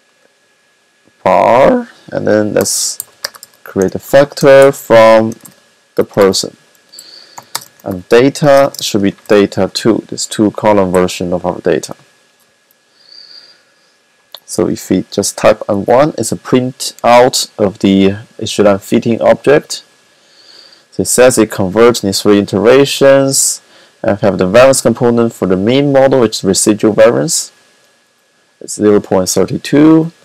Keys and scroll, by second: 2.3-9.9 typing, 14.3 typing, 17.9 typing.